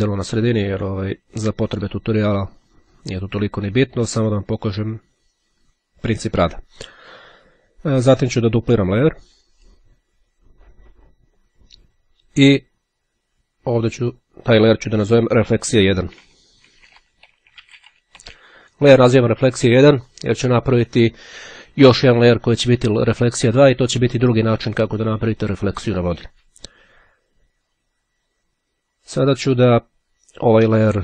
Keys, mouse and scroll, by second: 9.7-11.3 drag, 13.5 click, 15.0-18.7 typing.